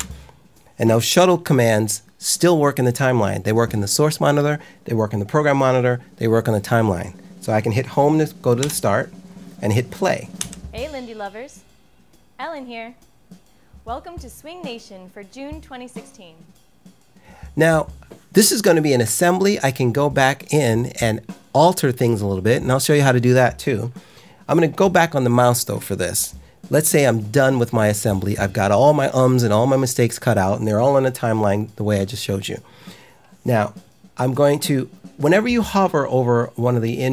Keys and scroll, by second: 8.5 Home, 10.3 i.